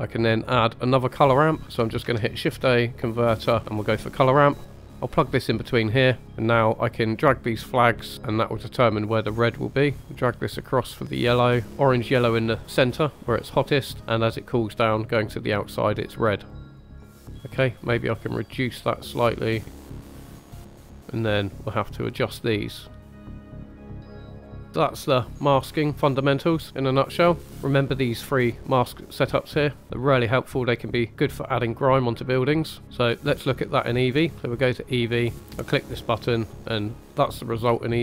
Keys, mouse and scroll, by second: 1.1 click, 2.0 shift+a, 5.9 scroll up 3, 6.7-7.2 drag, 9.5 click, 10.0-11.7 drag, 13.9-14.5 scroll down 1, 16.7 drag, 17.1 middle click, 18.8-20.0 drag, 20.2 click, 20.6 click, 21.0 middle click, 21.9 middle click, 22.7 click, 23.2-23.6 drag, 23.6-24.2 drag, 24.4 scroll down 3, 24.6 scroll up 1, 25.4-25.8 scroll down 3, 26.0 middle click, 26.6 scroll down 1, 26.9 middle click, 27.6 scroll down 2, 28.1 middle click, 28.8 middle click, 29.2 middle click, 32.8 click, 32.8-33.3 scroll up 2, 35.6 click, 36.4-36.8 middle drag.